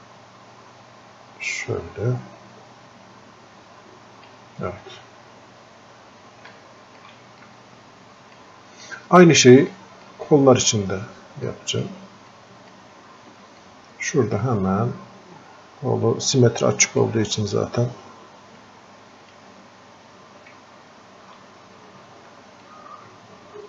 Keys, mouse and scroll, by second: 5.4-5.9 scroll up 1, 6.5 alt+click, 7.4-8.9 drag, 8.9 click, 9.7 alt+click, 10.3-10.7 scroll up 1, 10.8 scroll down 1, 11.5 alt+click, 12.3-13.6 drag, 13.6 click, 14.9 scroll up 1, 15.0 scroll down 1, 16.9 right click, 18.6-21.7 drag, 22.2 click, 22.7-23.6 alt+drag.